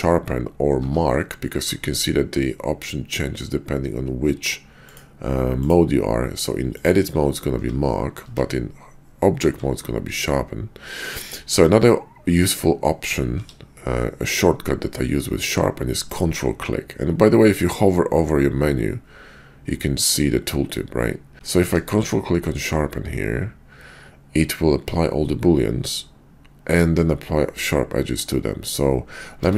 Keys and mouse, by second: 0.8 Tab, 1.5 q, 5.5 click, 7.6 q, 8.2 Tab, 9.5 q, 13.4 q, 21.6 q, 29.3 Tab.